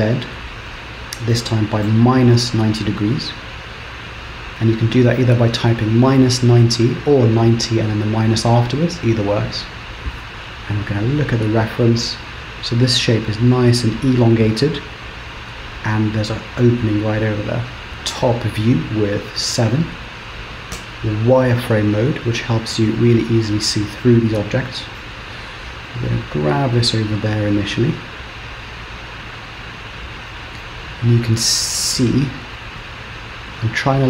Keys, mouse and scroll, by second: 9.4-10.2 scroll down 1, 17.9-19.0 scroll down 1, 19.0 KP_7, 19.3 KP_7, 20.8 z, 23.2-23.8 scroll up 1, 24.1 shift+middle click, 25.9 g, 30.7 middle click, 32.6 g.